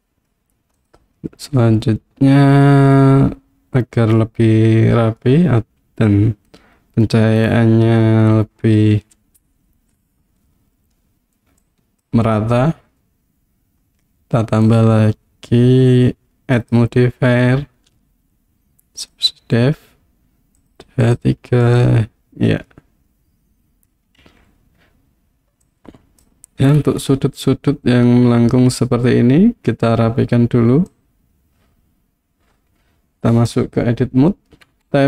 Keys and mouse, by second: 0.8 click, 4.2-5.2 middle drag, 11.7 click, 14.7 click, 16.6-19.1 drag, 20.7 click, 21.0 click, 22.7-23.9 middle drag, 24.2 KP_1, 25.7 click, 30.9-33.5 drag, 34.7 Tab.